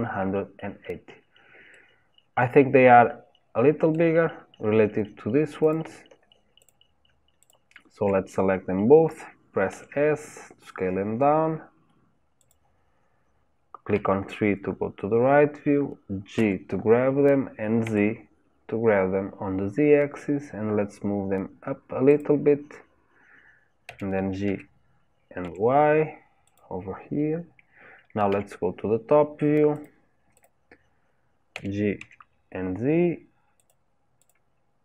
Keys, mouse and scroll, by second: 0.5-1.1 scroll up 3, 1.1-1.7 scroll down 1, 1.7-5.7 middle drag, 5.7 click, 6.7 click, 7.5 shift+click, 9.8 s, 14.0 KP_3, 16.4 g, 23.9 g, 28.3 KP_7, 29.8 click, 30.4 click, 31.6 g, 34.3 click.